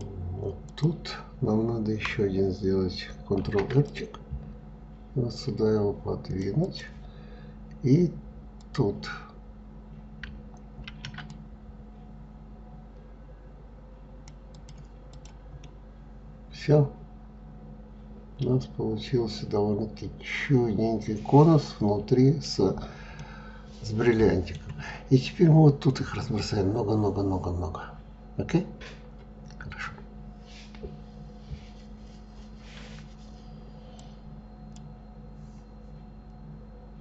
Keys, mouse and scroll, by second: 0.2 click, 3.0 ctrl+r, 8.2 click, 10.4 ctrl+r, 14.7 click, 15.2-18.2 middle drag, 22.1-22.8 scroll down 4, 22.8-25.8 middle drag.